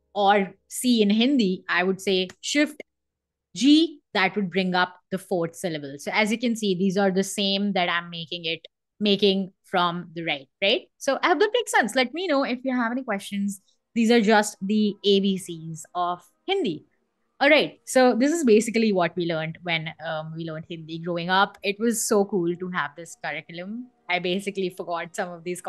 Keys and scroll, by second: 1.9 shift+g, 3.4 Escape, 18.0 BackSpace.